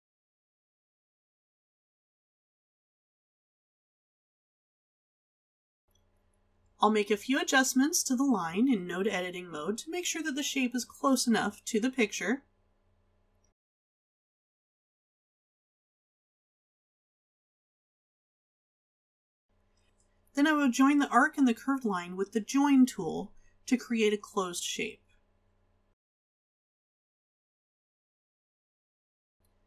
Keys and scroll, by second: 5.3 space.